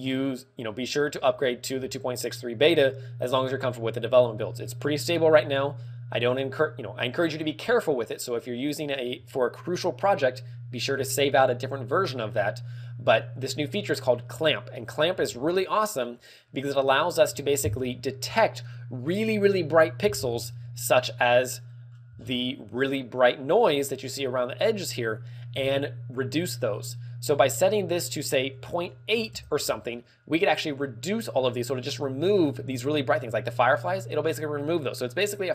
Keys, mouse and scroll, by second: 0.6-1.2 scroll up 2, 1.2 middle click, 1.7-2.1 scroll up 2, 2.5 middle click, 20.7 click, 21.1 middle click, 22.0-22.4 scroll down 4, 22.8 alt+middle click, 27.4 ctrl+click.